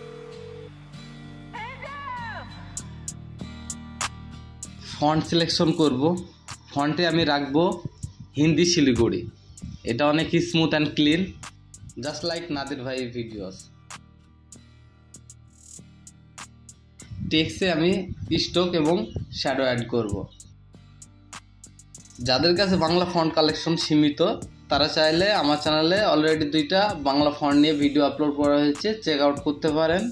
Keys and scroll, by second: 0.8 Return, 12.2 ctrl+t, 26.6 Up.